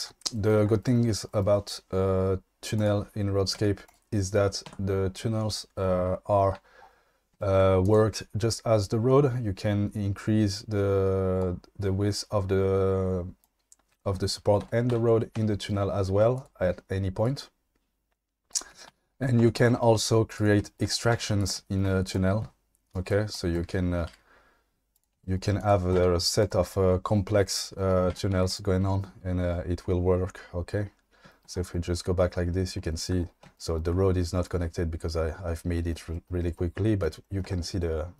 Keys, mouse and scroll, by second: 2.8 click, 3.5 q, 4.7 Tab, 8.8-11.4 drag, 11.9-13.4 drag, 14.6 ctrl+z, 14.9 ctrl+z, 17.2-18.5 drag, 18.9 ctrl+z, 19.4 2, 20.0 shift+d, 21.1 1, 21.4 click, 22.0 click, 22.9 click, 23.4 click, 24.1 g, 24.9 click, 26.0 e, 28.1 Tab, 28.3 q, 34.2-35.7 middle drag, 37.0-37.4 shift+middle drag, 37.7 middle click.